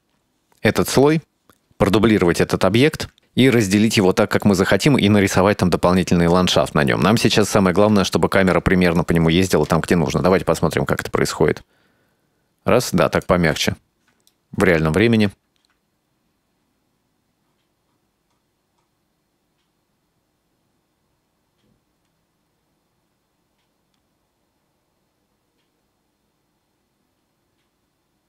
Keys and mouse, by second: 0.5 Tab, 3.8 middle click, 6.1-7.4 middle drag, 8.1-8.6 shift+middle drag, 9.0 right click, 9.7 KP_Decimal, 10.8-13.3 drag, 13.5 space, 14.4-14.8 middle drag.